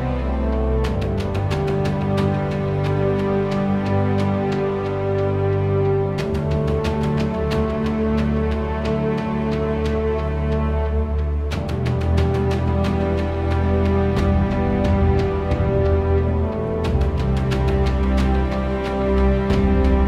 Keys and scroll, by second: 0.2 Return, 8.0 1, 8.4 Return, 14.9 v, 16.3 k, 18.8 c.